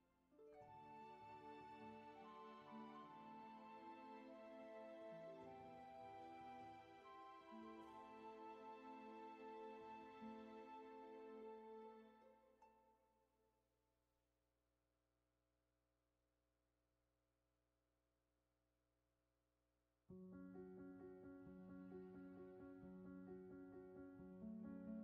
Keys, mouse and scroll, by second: 1.0 ctrl+z, 21.5 ctrl+z.